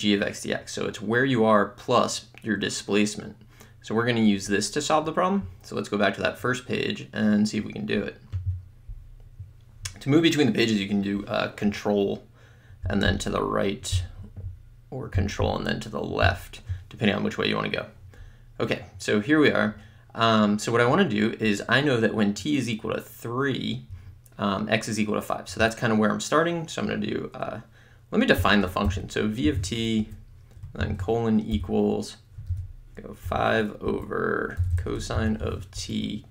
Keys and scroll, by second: 28.4 v, 28.9 (, 29.6 t, 30.1 Right, 31.6 =, 32.9 /, 33.3 5, 33.9 Down, 34.4-36.3 typing.